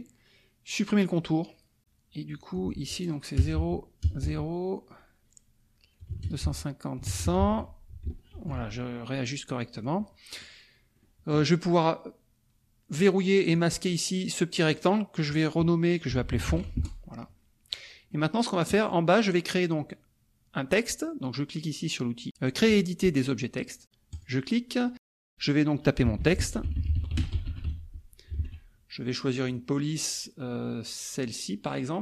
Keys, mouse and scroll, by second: 1.1 click, 2.5 click, 3.3 KP_0, 3.5 Tab, 6.0 KP_2, 6.2 KP_0, 6.4 Tab, 7.0 KP_1, 7.1 KP_0, 7.4 Tab, 8.3 ctrl+shift+r, 9.3 click, 9.7 click, 11.0 click, 12.9-15.0 drag, 15.8-17.0 typing, 18.1 click, 24.2 click, 25.9-28.0 typing, 28.3 ctrl+a, 29.5 click, 31.2 click.